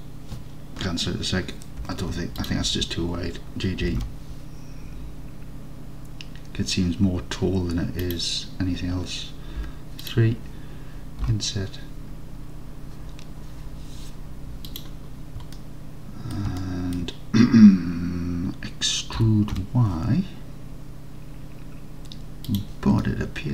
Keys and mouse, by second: 1.9 1, 2.4 alt+click, 4.0 g, 4.1 g, 8.1 click, 9.7 3, 11.3 i, 14.8 click, 15.6 alt+click, 16.8 alt+click, 19.2 e, 19.6 y, 23.1-23.5 alt+drag.